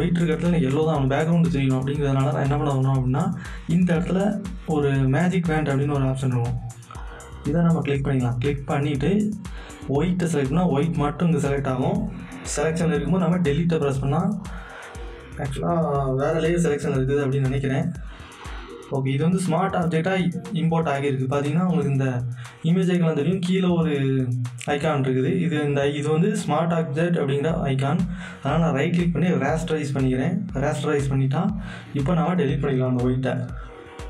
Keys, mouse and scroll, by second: 6.9 Return, 7.0 click, 10.3 click, 14.4 click, 14.4 click, 18.4 click, 18.4 click, 21.7-22.7 scroll down 1, 22.7-24.5 scroll, 24.5 scroll up 1, 28.5 scroll up 1, 28.5 right click, 31.1 click, 31.1 click.